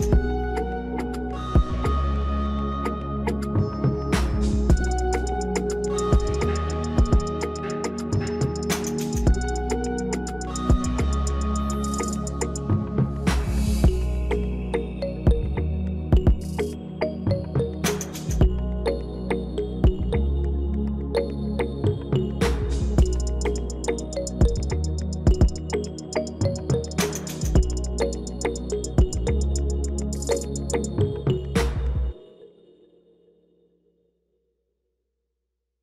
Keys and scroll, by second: 17.4 ctrl+|, 17.5 ctrl+[, 19.0 -.